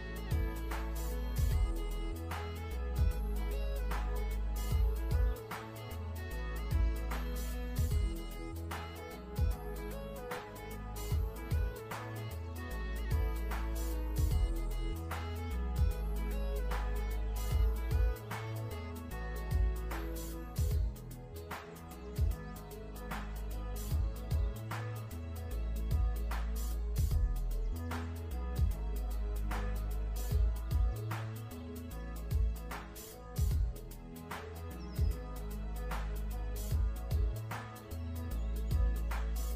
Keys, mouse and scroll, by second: 0.0 shift+click, 1.5 click, 3.5-4.2 alt+shift+scroll up 2, 4.2 click, 4.7 v, 4.8 click, 5.1-5.6 alt+shift+scroll up 2, 5.6 l, 6.8 v, 6.9 click, 9.1 v, 9.3 click, 9.9 click, 10.1 alt+shift+scroll down 1, 10.4 v, 10.7 click, 12.1 ], 12.8 click, 17.4 alt+shift+scroll up 1, 17.6 click, 18.5-19.5 scroll up 1, 19.6 click, 23.6 click, 27.7 BackSpace, 28.0 click, 28.4 BackSpace, 28.9 click, 29.4-29.7 alt+shift+scroll down 3, 30.3 ctrl+g, 30.7 click, 31.6 alt+shift+scroll up 2, 32.3 i, 32.4 click, 32.7 v, 32.9 click, 33.2-33.6 scroll up 1, 34.1 click, 34.4 scroll up 1, 34.8 g, 35.2 click, 35.6 v, 35.9 click, 36.3 scroll up 1, 36.5 v, 37.2 click.